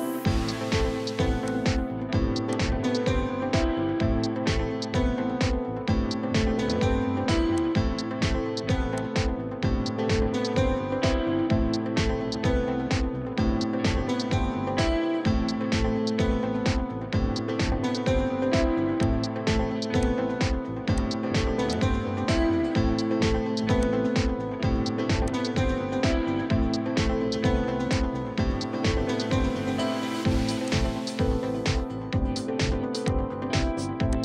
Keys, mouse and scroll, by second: 3.5 scroll up 1, 3.6 middle click, 5.8 scroll up 1, 9.4-9.7 scroll up 1, 9.7 middle click, 10.4-11.9 scroll up 1, 12.8 middle click, 14.0 scroll down 1, 14.3 middle click, 16.7-17.2 scroll down 1, 22.3 scroll down 1, 26.9 Escape, 27.2 Escape, 28.9 scroll down 1, 31.0-31.3 scroll up 1, 32.2-33.1 scroll down 1.